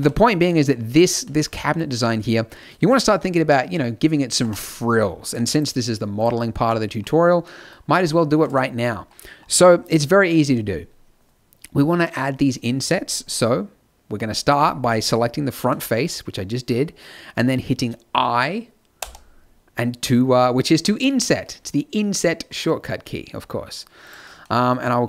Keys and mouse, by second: 0.6 middle click, 4.3 Tab, 5.4-7.7 drag, 18.9 i, 24.3 middle click.